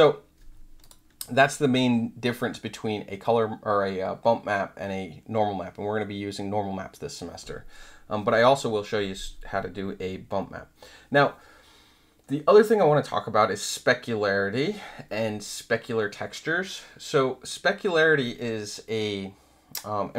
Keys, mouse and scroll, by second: 0.8 click.